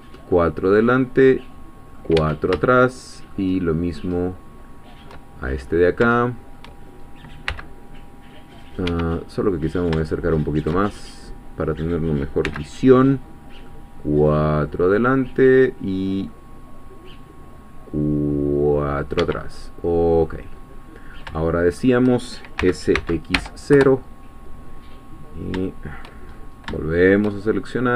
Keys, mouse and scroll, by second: 0.3-2.1 middle drag, 2.2 Escape, 2.6 shift+middle click, 3.6 shift+middle click, 5.5-6.0 shift+scroll up 3, 6.2 shift+middle click, 7.5 c, 8.9 Escape, 9.3 middle click, 10.1 shift+middle click, 11.1-12.0 shift+scroll up 3, 12.0-12.5 scroll up 1, 12.5 c, 13.7 middle click, 14.5-14.9 scroll up 2, 16.3-19.3 middle drag, 19.2 Escape, 19.6-20.5 scroll down 1, 21.1 scroll down 2, 21.4 shift+middle click, 22.1 shift+scroll up 1, 22.6 s, 23.0 x, 23.3 0, 23.7 Return, 25.3-25.6 scroll down 3, 25.7 shift+middle click, 26.3-26.7 shift+scroll up 3, 26.8-27.9 shift+middle drag.